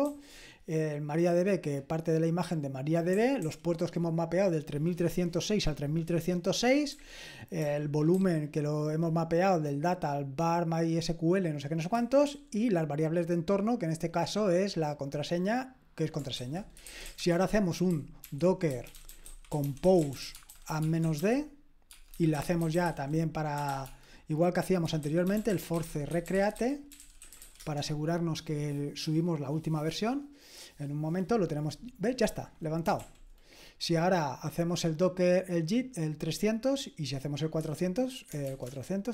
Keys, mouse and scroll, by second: 0.0 typing, 3.4 typing, 7.6-8.9 typing, 12.2 typing, 16.5-27.9 typing, 32.9 ctrl+l, 35.1 click, 37.6 click, 37.6-38.6 typing.